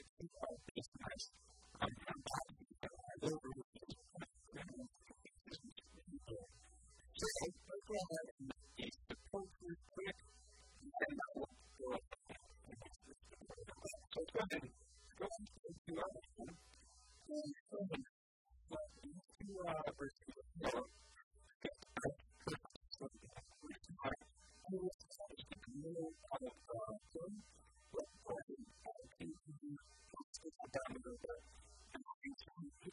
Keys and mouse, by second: 0.0 middle click, 0.7 Tab, 4.5-9.0 middle drag, 4.9 KP_1, 11.7-13.8 middle drag, 13.8 Tab, 14.9 KP_1, 16.0 a, 16.5 b, 18.3 middle click, 20.5 shift+s, 23.7-25.5 drag, 25.5 s, 27.3-30.0 drag, 29.1 s, 31.2 Tab, 31.7 Tab, 32.2 KP_1, 32.7 KP_3.